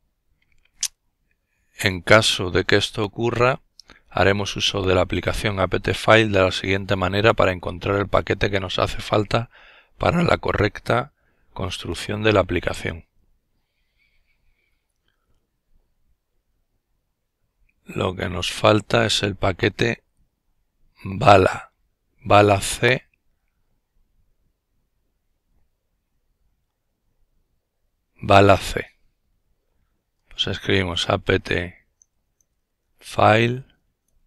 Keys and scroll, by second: 28.2-34.0 typing.